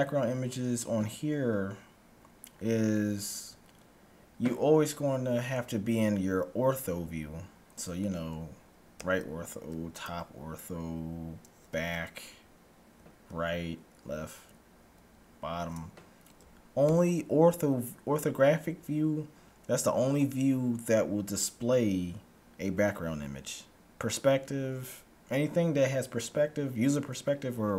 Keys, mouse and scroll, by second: 0.6-2.1 middle drag, 2.6-4.6 middle drag, 9.1 KP_3, 10.1 KP_7, 16.2 KP_1.